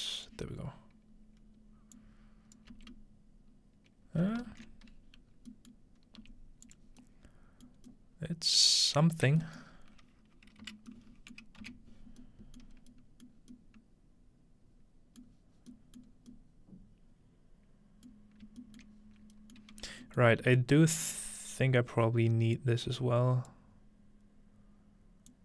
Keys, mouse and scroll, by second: 2.0-3.4 drag, 2.7 f, 4.5 ctrl+z, 5.3-5.7 scroll down 1, 5.7-6.8 ctrl+middle drag, 6.2 g, 6.7-7.7 drag, 7.4-8.5 scroll up 2, 7.8 middle click, 8.5-9.0 scroll up 1, 9.1 middle click, 9.2-10.9 scroll down 1, 9.6-10.9 middle drag, 11.6 middle click, 12.6 middle click, 12.7-13.4 scroll up 1, 13.4 middle click, 13.4 scroll down 1, 15.4 middle click, 16.1 middle click, 16.1-17.0 scroll up 1, 17.0-18.1 scroll up 1, 18.5 shift+middle click, 18.9-19.4 shift+middle drag, 19.2-19.7 scroll up 1, 19.6 middle click, 19.7 scroll down 1, 20.4 g, 21.0-22.5 drag, 21.6-23.5 scroll up 2, 22.6-23.5 drag, 25.3-25.4 drag.